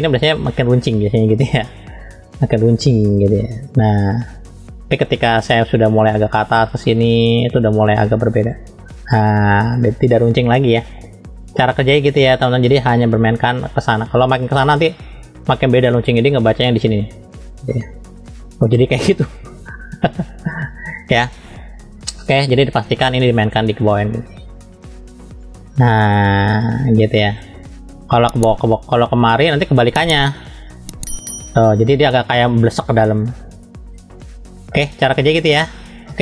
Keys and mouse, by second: 0.6 click, 2.0-3.2 typing, 3.5 click, 5.5-7.4 drag, 8.4 click, 13.4-17.4 drag, 18.2 click, 22.8-24.7 drag, 25.4 click, 27.4-29.9 drag, 30.8 click, 33.9 click, 35.5 middle click.